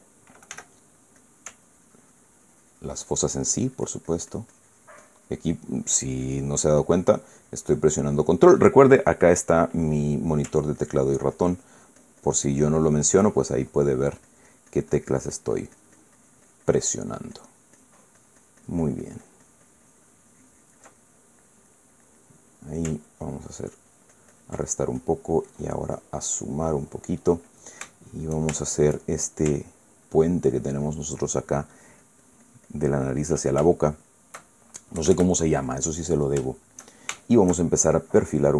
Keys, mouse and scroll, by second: 1.2 f, 1.9 click, 2.4-9.2 ctrl+drag, 11.5-21.7 ctrl+drag, 21.7 ctrl+middle click, 22.4 middle click, 23.8 ctrl+click, 25.4-27.5 ctrl+drag, 27.5 middle click, 28.6 shift+middle click, 29.3 shift+middle click, 30.4-31.8 ctrl+drag, 32.3-34.1 ctrl+drag, 34.4 ctrl+shift+middle click, 34.9 shift+click, 35.7 KP_Add, 36.5 middle click, 37.2-38.4 shift+middle drag, 38.4 shift+scroll down 1.